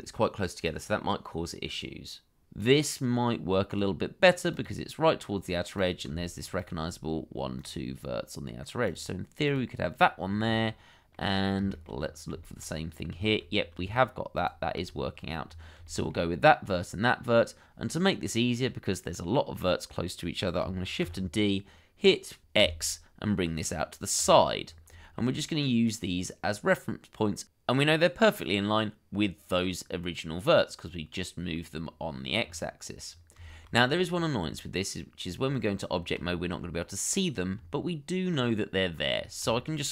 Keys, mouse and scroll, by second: 1.1 shift+middle click, 1.4-2.3 shift+scroll up 2, 2.7 shift+middle click, 2.9-4.5 scroll up 1, 6.6 shift+click, 7.3 scroll down 1, 10.2 scroll down 1, 10.5 shift+middle click, 11.7 shift+middle click, 11.9-12.4 scroll up 1, 12.4 shift+middle click, 12.6-13.2 shift+scroll up 1, 13.2-13.9 scroll up 2, 13.2 shift+middle click, 14.3 shift+click, 14.8-15.1 scroll down 1, 15.8 shift+middle click, 16.6-18.0 scroll up 1, 21.0 shift+d, 22.6 x, 24.6-24.9 scroll down 1, 25.0 shift+middle click, 33.0-33.3 scroll down 1, 33.5 shift+middle click, 33.7-34.4 scroll up 1, 34.4 Tab, 35.8 scroll up 1, 36.3 shift+middle click, 37.6 Tab, 39.1 scroll up 1, 39.5 shift+middle click.